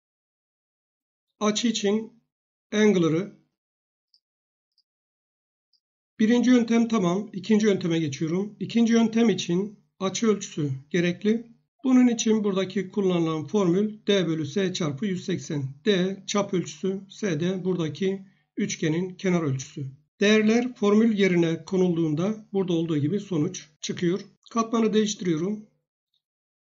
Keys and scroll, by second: 19.6 Escape.